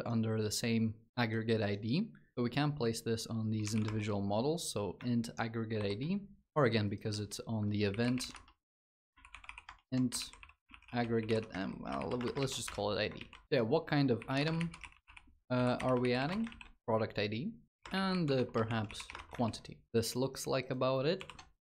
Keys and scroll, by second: 5.5 ctrl+BackSpace, 8.2 Tab, 11.3 ctrl+BackSpace, 12.2 ctrl+s, 12.4 Escape, 12.9 ctrl+s, 16.3 ctrl+s, 19.1 ctrl+s, 20.9 ctrl+d.